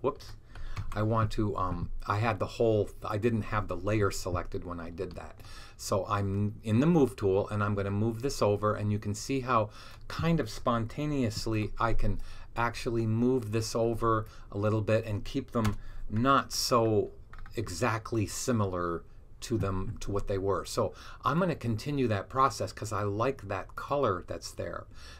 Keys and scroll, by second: 0.7 super+z, 11.2 super+t.